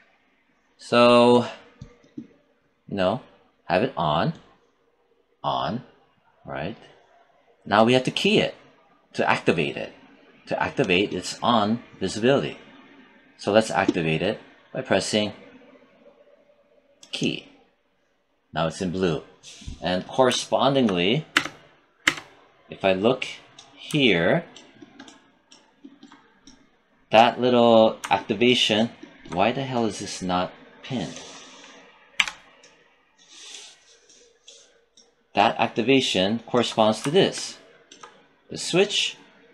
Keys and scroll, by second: 21.2 space.